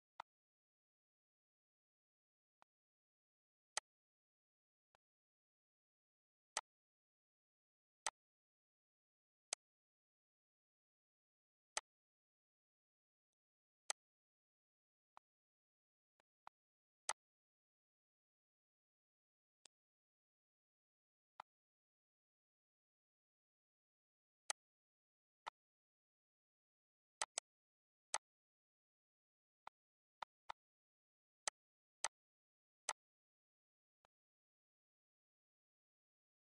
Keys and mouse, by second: 2.3 click, 3.5 click, 4.7 click, 6.3 click, 7.8 click, 9.3 click, 11.5 click, 13.1 click, 13.6 click, 14.6 click, 15.6 click, 16.6 click, 19.4 click, 21.1 click, 24.2 click, 25.2 click, 26.9 click, 27.3 z, 27.9 click, 29.4 click, 31.1 click, 32.7 click, 33.8 click.